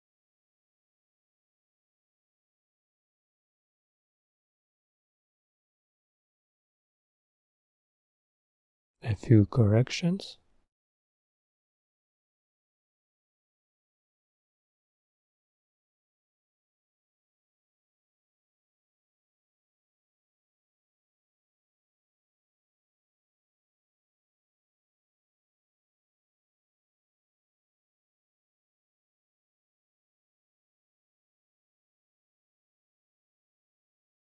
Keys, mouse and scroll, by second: 5.1-6.1 drag, 9.6 click, 11.3 click, 12.7 click, 13.0 drag, 15.1 click, 19.1-20.5 drag, 22.8 click, 23.4 click, 24.0 click, 25.3-34.3 drag.